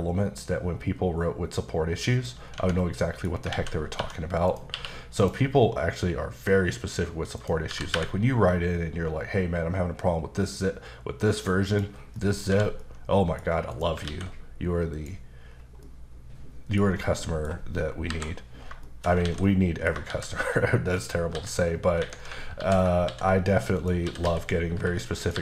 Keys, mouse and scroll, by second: 2.1 g, 2.6 Tab, 2.8 middle click, 3.4 scroll up 1, 3.5 alt+a, 4.5 click, 4.7 q, 5.2 click, 5.8-6.9 scroll down 1, 6.9-7.4 scroll down 1, 7.4 click, 7.7 g, 7.9 y, 11.7 click, 12.2 middle click, 12.5 h, 12.8 middle click, 13.7 click, 14.1 alt+x, 15.0 click, 15.5-15.8 scroll down 2, 15.8 middle click, 16.8 scroll up 2, 17.2 middle click, 18.1 KP_5, 18.8 shift+middle click, 19.4 middle click, 20.1 shift+a, 21.0 click, 21.3 s, 22.0 Escape, 22.6 alt+g, 23.8 click, 24.1-25.4 typing, 25.2 click.